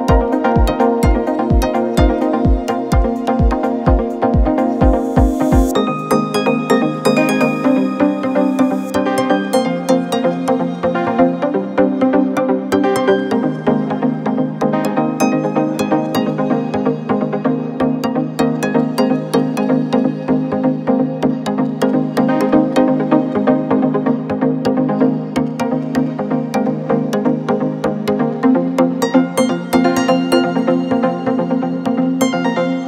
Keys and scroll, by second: 12.5 alt+Tab, 13.5 alt+Tab, 14.0 alt+Tab, 18.0 ctrl+c, 18.6 alt+Tab, 19.6 alt+Tab, 31.4 ctrl+v, 32.3 a.